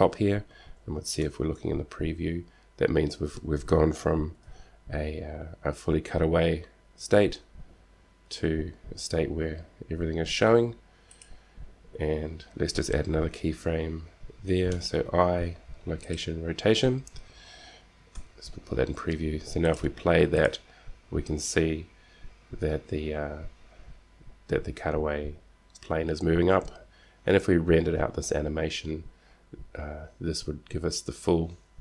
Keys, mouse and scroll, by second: 1.6 shift+z, 5.0 g, 11.8-13.6 drag, 15.0 i, 18.6 z, 20.0-23.0 drag.